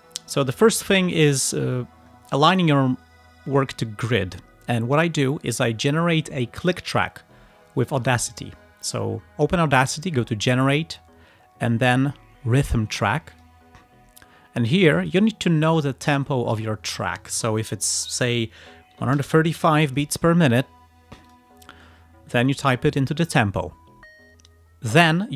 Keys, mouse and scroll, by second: 8.9 click, 13.4 click, 15.0 click, 18.7-20.1 typing, 21.3 click.